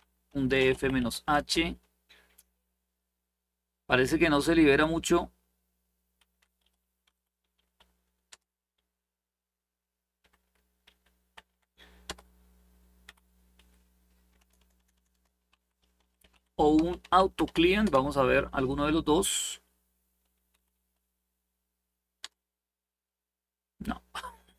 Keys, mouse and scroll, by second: 0.0-1.2 typing, 5.1-6.2 scroll down 1, 6.2 Up, 6.8 Up, 7.3 Up, 8.0 Return, 9.9 Up, 9.9-17.7 typing, 11.1 Down, 11.8 Return, 12.8 Up, 20.3 Up, 20.5 Up, 21.9 Return.